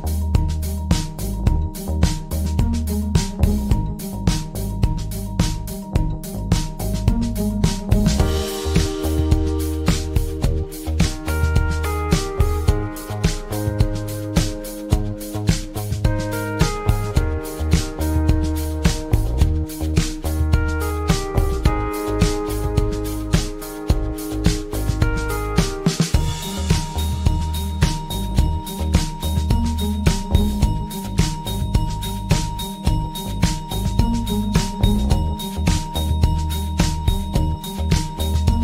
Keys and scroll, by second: 10.0 ctrl+z, 21.8 ctrl+z, 35.8 ctrl+z.